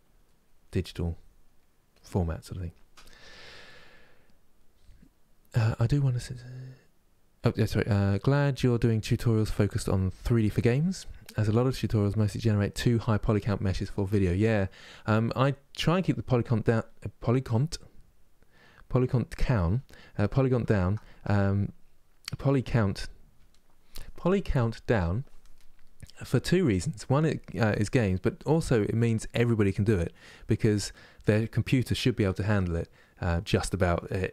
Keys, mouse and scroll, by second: 0.0 middle click, 0.4 click, 1.3 middle click, 1.6-15.5 drag, 15.5-34.3 middle drag.